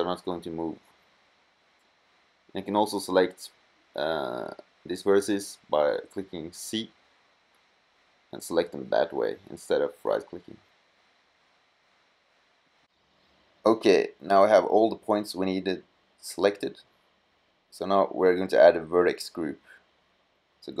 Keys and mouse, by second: 5.3 middle click, 6.5-7.7 middle drag, 7.7 c, 14.4 middle click.